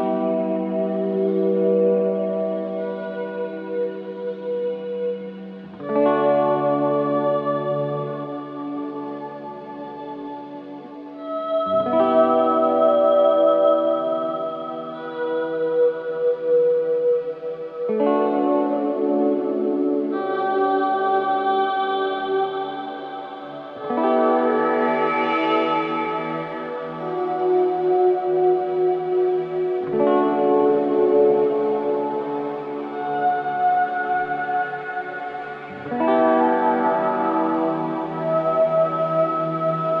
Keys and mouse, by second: 0.4 click, 0.9 shift+click, 1.1 shift+click, 1.9 typing, 3.1 click, 3.7-4.0 typing, 5.4 click, 7.5 typing, 8.5-9.3 ctrl+alt+drag, 9.8-10.2 typing, 12.3 click, 13.6-14.2 alt+drag, 15.1-15.8 typing, 17.5 click, 18.7-19.4 drag, 20.2-20.8 drag, 21.0-22.6 alt+shift+drag, 22.0 typing, 23.1-24.0 drag, 24.5-26.1 ctrl+alt+drag, 27.3-28.0 shift+drag, 32.5 click, 33.5 shift+click, 34.2 shift+click, 34.6 shift+click, 34.9-35.5 shift+drag, 37.5-40.0 drag.